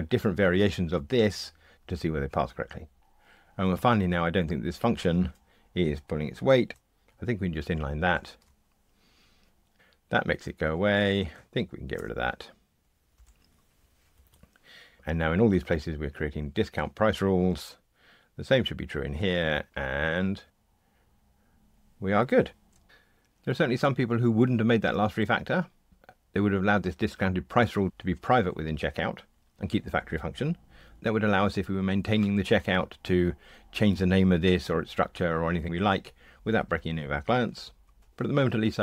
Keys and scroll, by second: 13.1 Delete, 14.1 Escape, 19.6 ctrl+r.